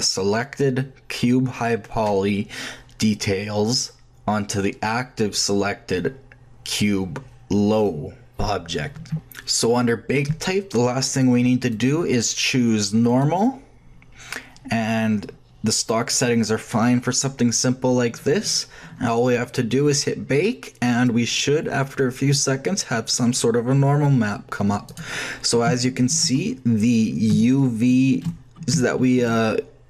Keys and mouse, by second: 11.5 shift+middle click, 11.7-13.3 shift+drag, 20.8-22.7 drag, 22.7-24.8 middle drag, 24.8-27.3 drag.